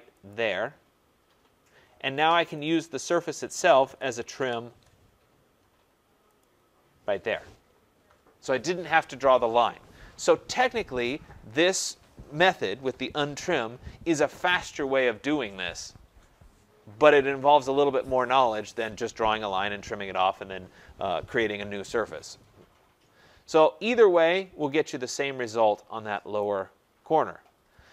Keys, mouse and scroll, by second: 0.2 click, 2.6 click, 3.8-4.3 typing, 6.4 click, 22.7 scroll, 26.3 right click, 26.7-27.6 scroll, 27.6 scroll, 27.7 middle click.